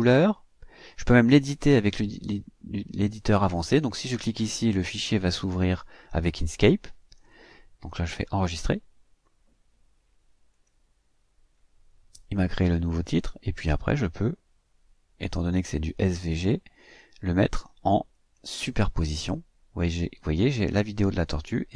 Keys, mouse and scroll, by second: 10.4 click, 13.2-16.6 drag, 18.1 click.